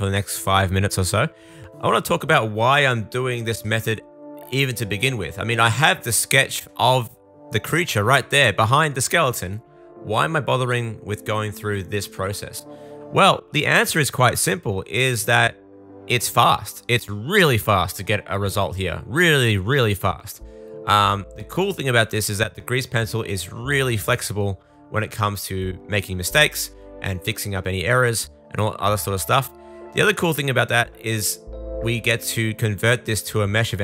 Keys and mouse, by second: 0.3 super+click, 0.3 super+middle click, 0.3 super+right click, 0.6 click, 0.6 middle click, 0.6 right click, 1.5 super+z, 1.5 super+z, 1.9 super+z, 2.9 super+z, 3.1 super+z, 3.9 super+z, 4.5 super+z, 5.3 super+z, 5.8 super+z, 5.8 super+z, 8.6 super+z, 8.8 super+z, 10.3 super+z, 10.4 super+z, 11.0 super+z, 13.4-14.8 shift+super+middle drag, 18.2 super+z, 20.6 super+z, 20.8 super+z, 25.0 super+z, 25.0 super+z, 25.6 super+z, 25.7 super+z, 33.0 super+middle click, 33.2 shift+middle click.